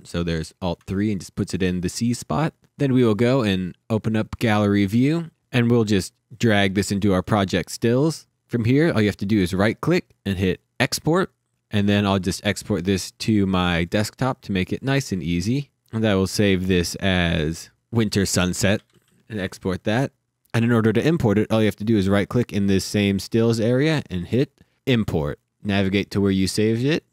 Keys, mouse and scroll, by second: 3.5 click, 5.3 Delete, 6.3 click, 9.0 right click, 10.3 click, 12.5 click, 13.3 click, 13.9 scroll down 1, 14.4 click, 15.5 click, 17.7 shift+Num_Lock, 17.9-19.5 typing, 21.6 right click, 24.5 click, 25.8-27.0 scroll down 1, 27.0 click.